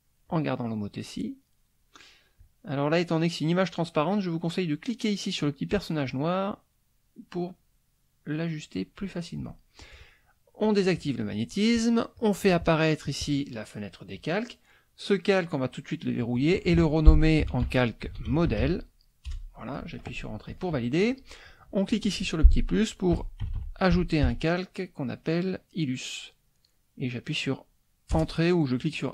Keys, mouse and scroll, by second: 0.3 click, 2.3 click, 6.0-9.1 drag, 10.7 click, 12.1 click, 13.0 click, 15.4 click, 16.2 click, 17.2-19.1 typing, 19.3 Return, 21.9 click, 22.9-24.7 typing, 28.1 Return.